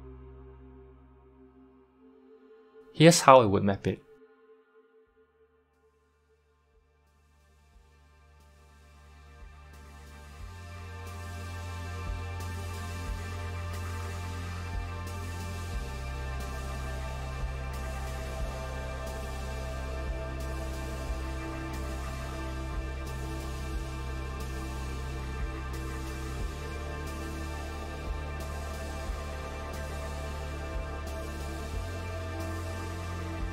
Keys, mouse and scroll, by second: 1.9 s, 5.6 s, 6.6 g, 12.0 g, 17.5 click, 18.5 g, 23.1 click, 23.7 g, 30.2 click, 31.0 g.